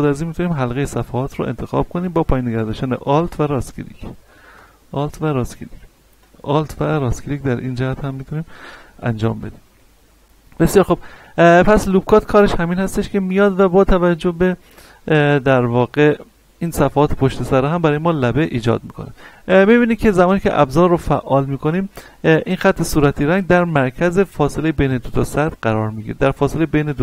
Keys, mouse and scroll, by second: 2.7 alt+Num_Lock, 3.0 alt+right click, 6.2 alt+right click, 7.3 middle click, 8.8 middle click, 9.9-10.3 scroll down 2, 10.3-11.9 scroll up 2, 12.4-12.9 scroll up 2, 13.6 right click, 14.3-14.6 scroll up 1, 17.1-19.3 drag.